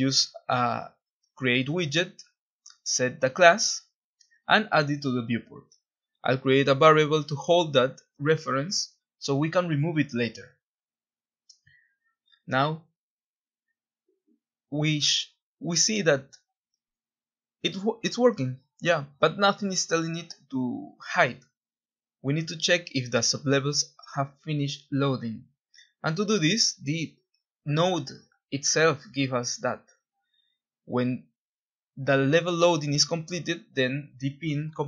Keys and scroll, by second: 0.0-2.8 typing, 4.2-7.5 typing, 9.8 ctrl+b, 12.7 w, 13.2 w, 13.3 w, 15.4 typing, 17.0 Escape, 18.7 alt+Tab, 20.1 Print, 22.7 Escape, 22.9 Escape, 27.7-28.6 typing, 32.6 ctrl+b.